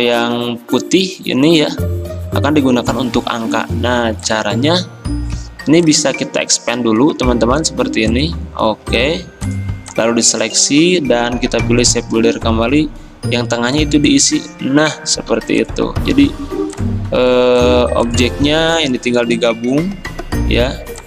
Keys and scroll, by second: 0.4 ctrl+z, 12.2 m, 15.4 v, 19.3 ctrl+z.